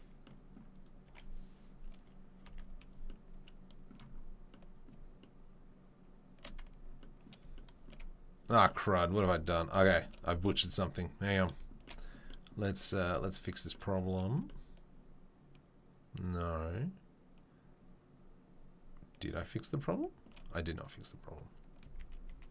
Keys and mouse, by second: 1.0 Delete, 2.4 a, 13.7 3, 22.3 ctrl+z.